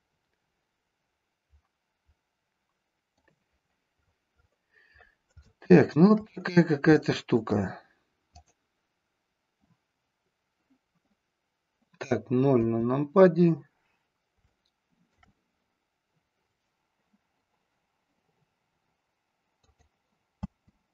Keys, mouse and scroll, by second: 5.5-6.1 shift+middle drag, 6.9-7.4 shift+middle drag, 8.3 click, 12.6 KP_0, 14.4 shift+middle click, 19.5 click, 20.3 space.